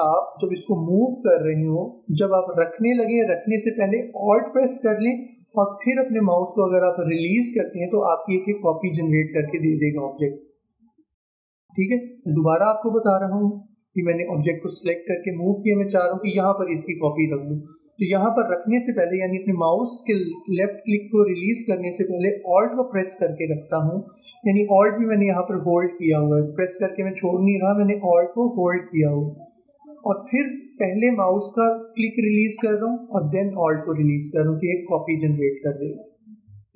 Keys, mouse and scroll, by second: 12.3 click, 12.6 ctrl+z, 14.3-24.7 drag, 35.2 click.